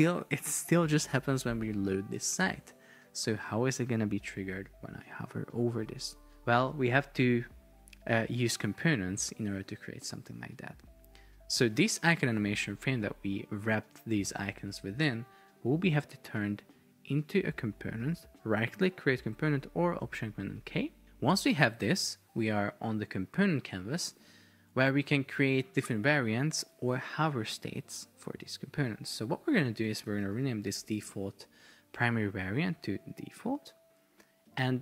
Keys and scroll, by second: 2.5 super+r, 29.7 super+r, 30.0 shift+d, 31.0 Return.